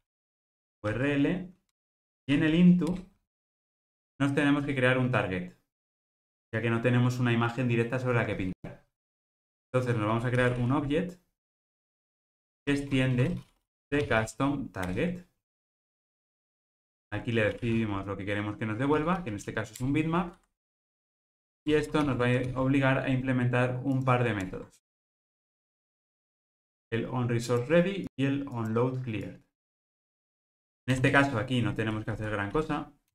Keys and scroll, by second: 12.1 Return, 22.1 alt+super+l.